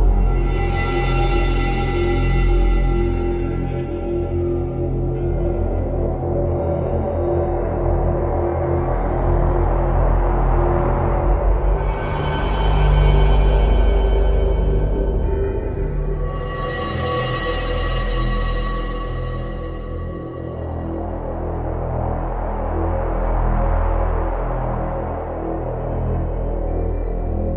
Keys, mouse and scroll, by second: 1.1 shift+d, 9.0 click, 10.1 shift+d, 14.1 click, 15.1 g, 20.6 click, 21.5 g, 25.8 right click.